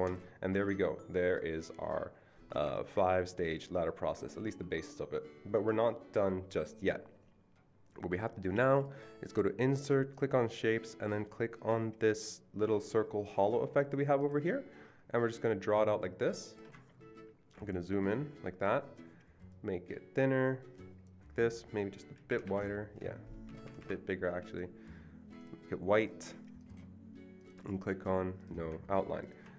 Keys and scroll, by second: 22.3 shift+Up, 22.4 shift+Right, 23.5 Escape, 23.6 Escape.